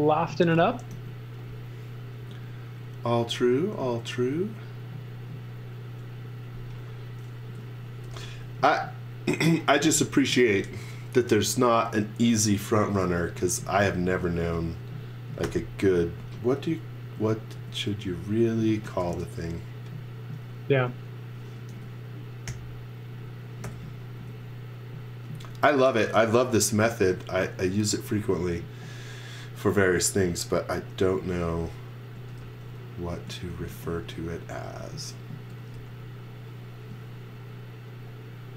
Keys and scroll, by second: 0.9 e, 2.2 l, 7.2-8.1 typing, 13.3 x, 13.6 v, 14.2 z, 15.4 i, 17.0 Right, 17.5 Left, 19.0 space, 21.7 super+z, 22.5 i, 23.6 Right, 24.1 Left, 26.7 space, 31.1-33.7 typing, 35.2-36.2 typing.